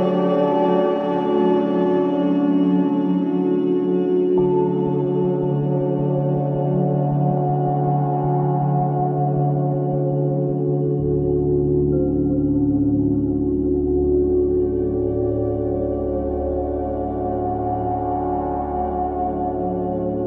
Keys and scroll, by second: 0.6 Escape, 5.2 f, 7.8 f, 10.1 f, 12.6 f, 15.3 F1, 19.4 F1.